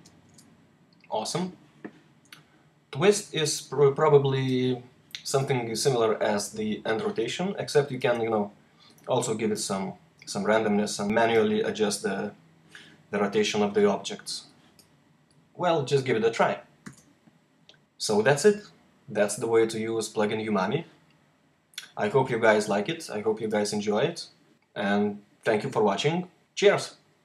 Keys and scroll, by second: 0.1 super+r, 0.3 super+r, 21.7 r.